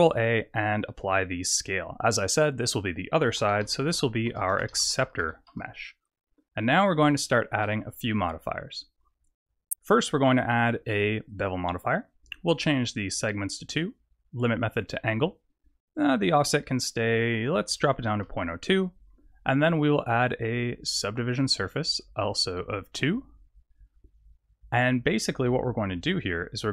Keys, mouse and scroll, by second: 2.5 click, 2.7 click, 3.8 c, 6.9 scroll up 2, 7.3 shift+middle click, 9.7 click, 12.9 click, 14.7 click, 16.7 click, 19.7 click, 20.0 click, 21.8 click, 23.0 click.